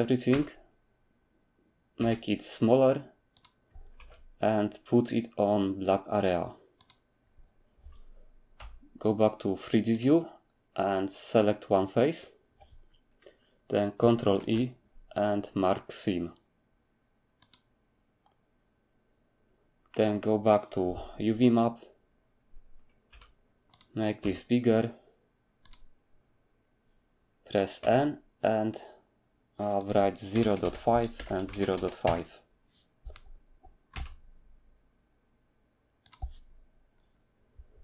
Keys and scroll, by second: 0.3 a, 2.0 s, 4.0 g, 8.6 3, 14.4 ctrl+e, 23.1 g, 24.2 s, 27.8 n, 30.3-31.7 typing, 32.0 Return, 33.9 s, 37.1 typing.